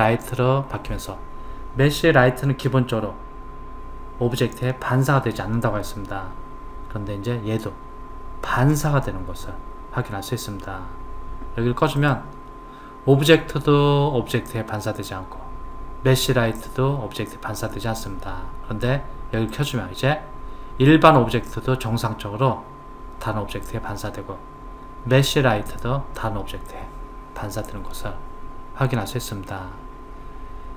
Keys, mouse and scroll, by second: 12.0 click, 19.6 click, 27.4-30.4 middle drag.